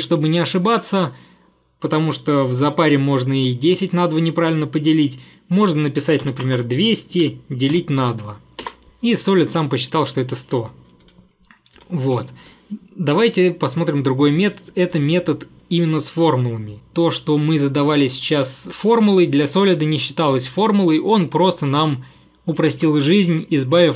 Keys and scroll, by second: 6.1-7.8 typing, 8.7 Return, 10.6-11.4 typing, 12.1 Delete.